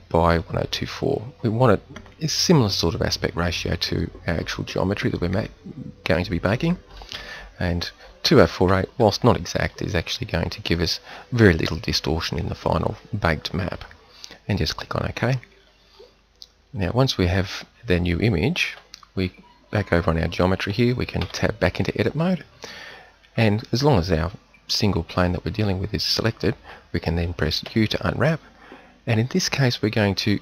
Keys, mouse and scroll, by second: 21.2 Tab, 27.7 u.